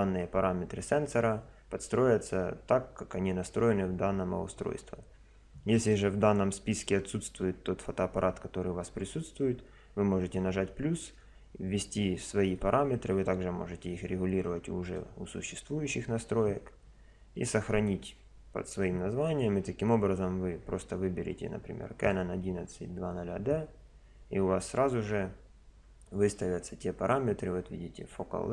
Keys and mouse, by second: 5.8 click, 12.6 click, 19.3 click.